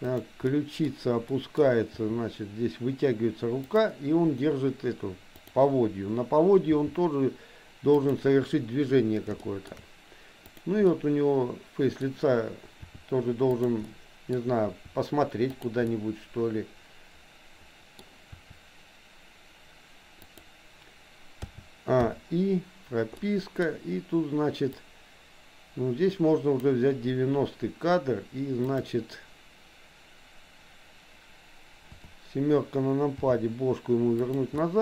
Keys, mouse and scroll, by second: 0.2 click, 0.4 middle click, 1.3 middle click, 2.1 r, 5.4 click, 6.8 g, 9.6 shift+middle click, 10.4 click, 10.8-12.1 middle drag, 12.8 r, 13.9 middle click, 14.8 r, 15.8-18.1 middle drag, 18.3 r, 21.4 a, 22.1 i, 23.3 middle click, 24.8-26.7 drag, 31.9 KP_7, 33.3 r, 34.6-34.8 middle drag.